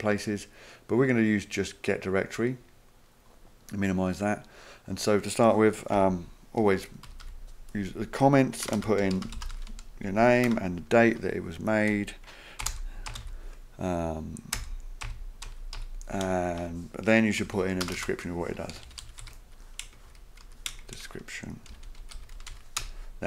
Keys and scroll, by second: 5.9 Up, 7.0 typing, 8.6-10.4 typing, 12.4-23.0 typing, 16.6 Return.